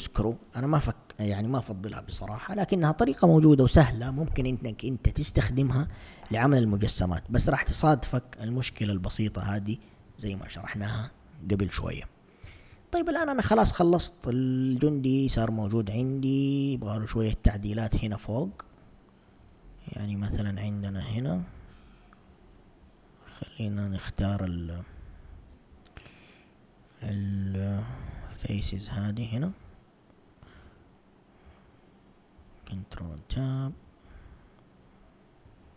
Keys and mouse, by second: 12.5 Tab, 13.0 Tab, 15.5 1, 16.1 Tab, 20.5 alt+click, 21.6 alt+click, 23.4 alt+click, 25.5 ctrl+Tab, 28.5 c.